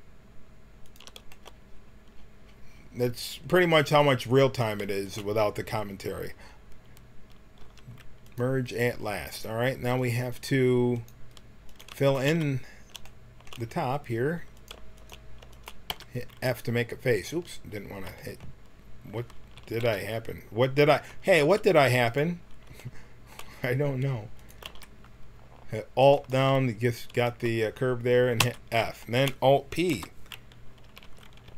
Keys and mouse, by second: 4.5-7.5 drag, 7.5 w, 10.2-11.6 right drag, 11.6-13.5 drag, 12.2 f, 13.5-14.7 right drag, 14.7-15.8 drag, 15.8 f, 15.8 g, 19.6 ctrl+z, 21.3 f, 22.0-25.4 drag, 24.6 f, 26.0-28.1 drag, 28.3 f, 29.9 alt+p, 30.8 a, 31.0 a, 31.4 t.